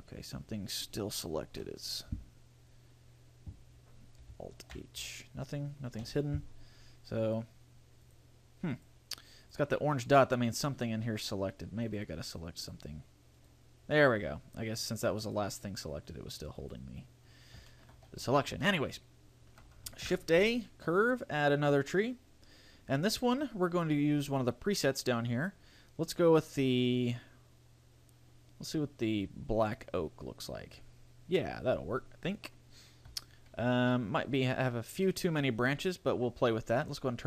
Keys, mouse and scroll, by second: 0.3-1.1 scroll up 5, 4.7 alt+h, 7.4 click, 8.3 click, 8.9 click, 9.6 click, 12.1 click, 12.9 click, 13.6 right click, 15.4 click, 16.9 click, 17.9 shift+middle click, 18.3 a, 18.5 scroll down 2, 18.8 shift+middle click, 20.2 shift+a, 24.0-25.5 scroll down 4, 25.5 click, 25.5-26.0 scroll down 1, 31.0-31.5 scroll down 4, 31.5-32.7 scroll up 1, 35.2 middle click.